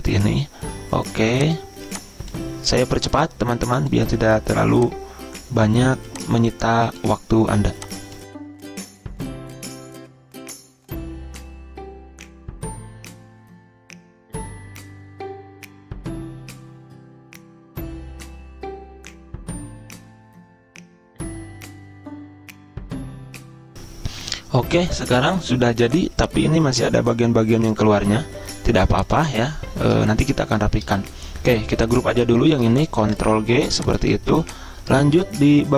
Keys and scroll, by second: 16.3 ctrl+z, 18.2 ctrl+z, 21.0 ctrl+c, 21.1 ctrl+v, 33.0 ctrl+g, 34.0 ctrl+z.